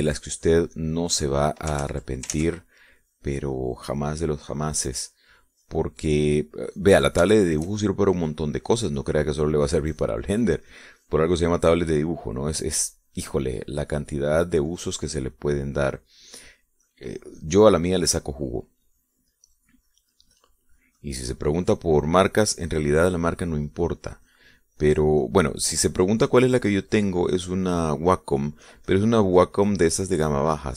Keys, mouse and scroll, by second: 0.2 shift+middle click, 1.1 shift+middle click, 2.1 click, 2.6 click, 3.5 ctrl+z, 4.6 click, 5.2 click, 5.5 click, 6.2 click, 6.6 click, 7.3 click, 7.7 click, 8.4 click, 9.0 shift+middle click, 9.8 click, 10.4 click, 11.1 click, 12.0 click, 12.4 click, 12.7 click, 13.4 click, 14.5 middle click, 15.2 click, 15.7 click, 16.1 click, 16.4 click, 18.6-20.1 drag, 20.2 click, 20.6 click, 21.0 click, 21.6 click, 22.5 click, 23.1-24.5 drag, 25.4 click, 27.8-29.0 drag, 29.1-30.1 drag.